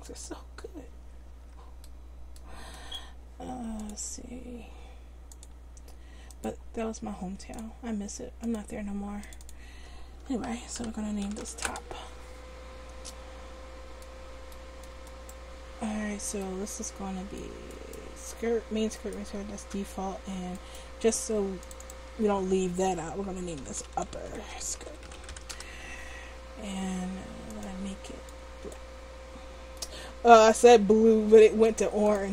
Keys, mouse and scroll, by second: 0.9 Tab, 1.3 Tab, 19.8 Tab, 20.2 Tab, 23.7 click, 23.9 p, 27.5-29.4 drag, 31.6-32.3 drag.